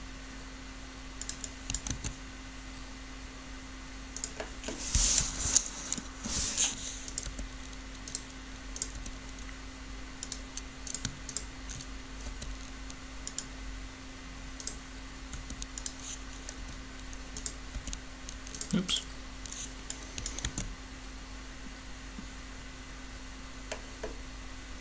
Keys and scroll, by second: 1.9 alt+a, 5.0 7, 7.2 r, 12.2 shift+r, 15.3 r, 20.4 alt+a.